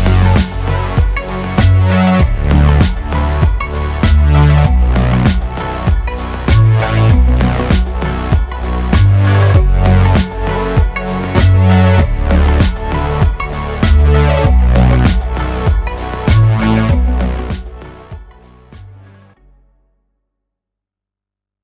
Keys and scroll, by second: 8.7 Tab.